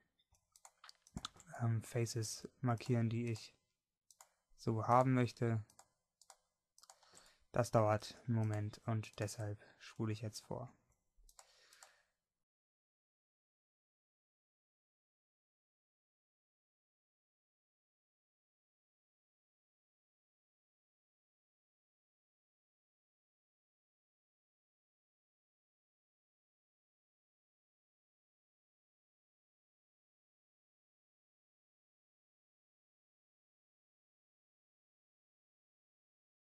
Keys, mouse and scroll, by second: 7.8 middle click, 15.5 shift+right click, 20.5 middle click, 22.5 middle click.